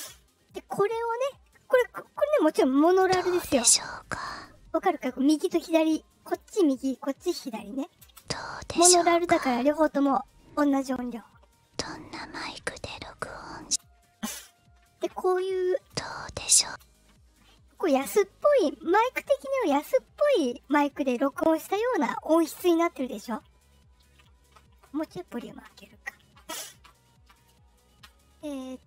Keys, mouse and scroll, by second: 2.0 click, 2.8 space, 4.8 space, 8.0 space, 13.6 space, 15.7 space, 16.6 space, 23.4-23.8 ctrl+scroll up 2.